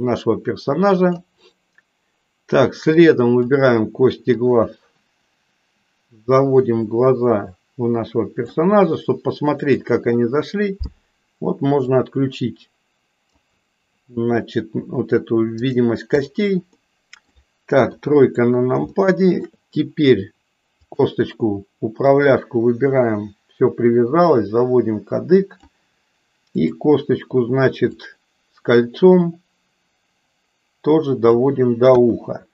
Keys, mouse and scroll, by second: 3.0 click, 4.6-8.6 drag, 11.9-13.3 drag, 15.5 click, 16.2 click, 16.8 middle click, 17.8 KP_3, 18.9 middle click, 20.9 click, 22.0 click, 22.3-25.7 drag, 28.0-31.4 drag, 31.9 KP_1.